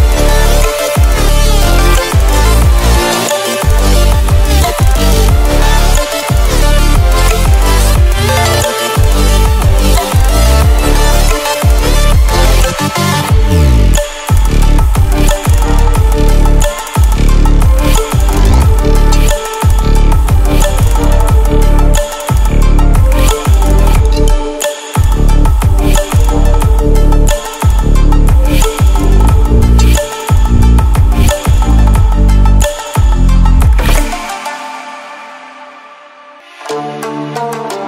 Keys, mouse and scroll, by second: 0.5-1.8 drag, 11.4-24.4 drag, 24.4 right click, 26.3 click, 27.2-27.6 scroll down 2, 28.6-34.1 drag, 34.1 ctrl+alt+scroll up 1, 36.0-37.7 alt+shift+drag, 37.7 Right.